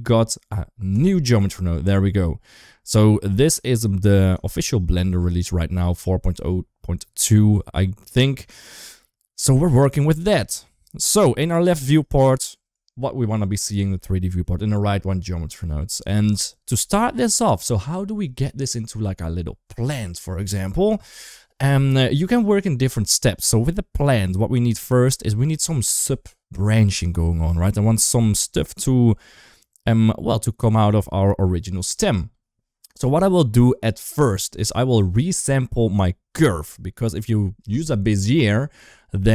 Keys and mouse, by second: 0.7 click, 1.4 middle click, 2.8 click, 4.3 shift+middle click, 5.1 shift+middle click, 8.3 shift+middle click, 9.8 click, 11.4 shift+middle drag, 15.4 middle click, 34.7 shift+middle click.